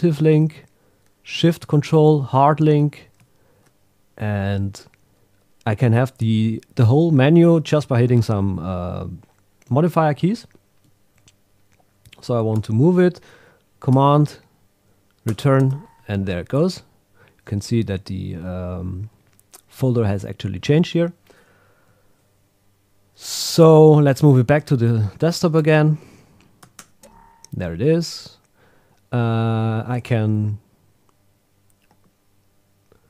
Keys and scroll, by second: 13.9 super+x, 15.3 super+Return, 24.5 Tab, 26.8 super+Return.